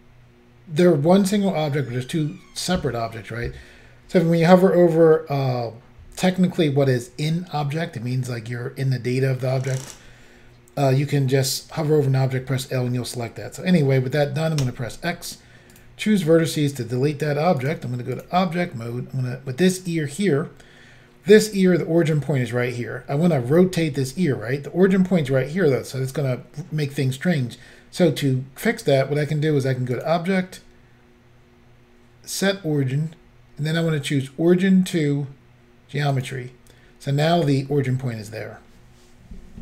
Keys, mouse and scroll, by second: 14.7 x, 15.8 click, 17.6 click, 18.2 click, 19.8 click, 19.9 click, 30.0 click, 30.1 click, 36.2 click.